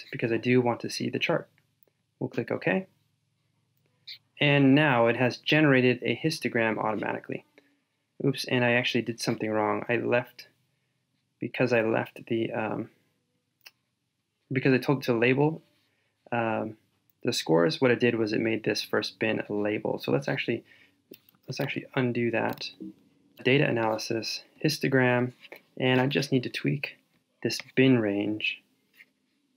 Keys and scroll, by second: 21.5 super+z, 22.6 super+z.